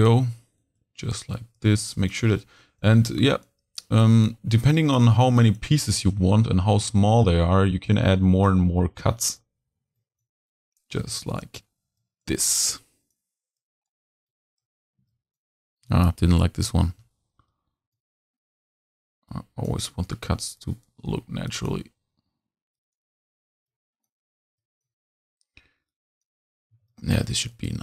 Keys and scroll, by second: 16.3 super+z, 26.7 z.